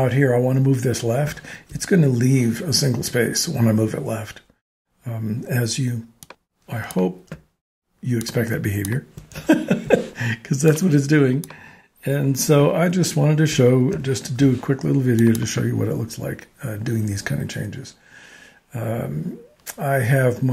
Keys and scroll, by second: 1.5 shift+Tab, 9.6 alt+shift+Tab, 10.2 shift+Tab, 14.2 shift+Tab.